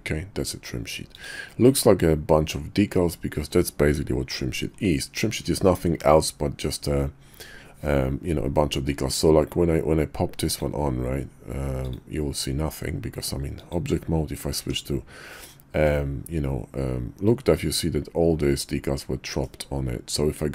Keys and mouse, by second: 13.6 click, 14.6 Tab, 15.5-19.4 middle drag.